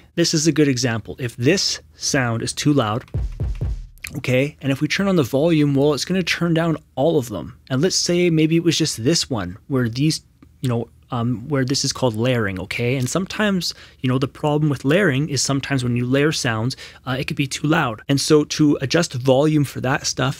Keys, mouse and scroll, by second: 3.0 space, 3.2 q, 3.4 q.